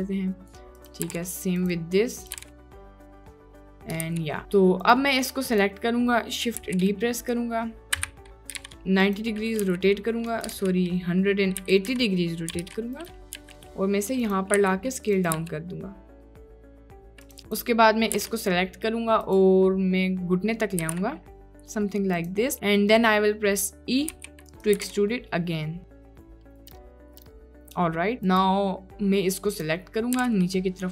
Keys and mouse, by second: 1.1 g, 2.4 g, 3.5 click, 4.1 ctrl+d, 4.9 click, 6.7 shift+d, 8.0 r, 9.6 g, 10.5 ctrl+z, 11.6 r, 13.4 g, 14.6 s, 15.3 g, 18.2 g, 20.9 g, 24.1 e, 24.8 g, 26.5 click, 26.7 g, 27.2 g, 28.3 click, 30.1 g.